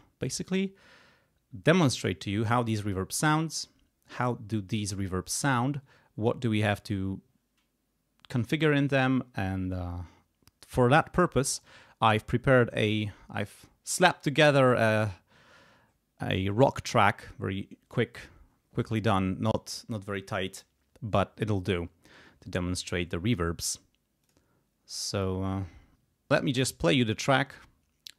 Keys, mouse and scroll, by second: 24.2 click, 25.1 click, 26.5 click, 27.4-28.0 scroll down 3.